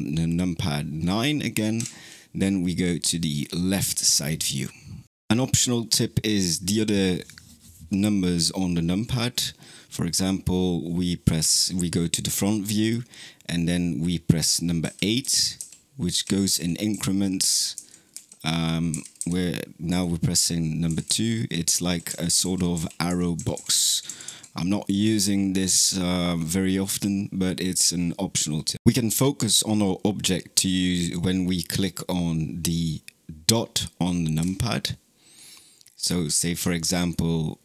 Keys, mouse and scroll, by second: 1.6 KP_9, 11.2 KP_1, 14.6-24.1 typing, 34.2 KP_Decimal, 35.7-36.5 scroll down 7, 36.5-37.6 shift+middle drag.